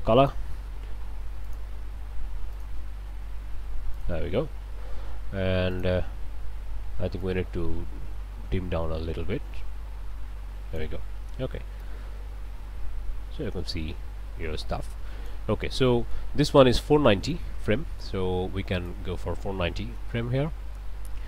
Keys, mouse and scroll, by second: 0.2 click, 1.4 click, 2.5-4.2 drag, 5.7-6.8 drag, 7.2-11.0 drag, 11.8-15.5 drag, 15.8 click, 17.1 click, 18.8 click, 19.7 4, 19.9 9, 20.1 0, 20.6 Return.